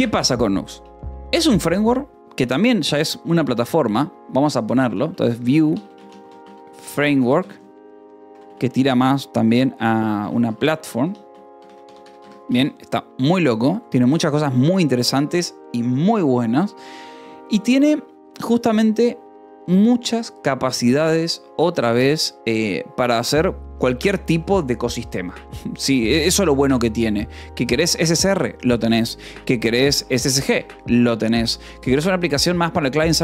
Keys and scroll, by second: 1.3 BackSpace, 2.2 Return, 5.1-8.7 typing, 9.8-12.2 typing, 13.0 ctrl+s, 13.7 o, 21.1 space, 27.9 space, 29.5 /, 29.6 space, 30.4 Escape.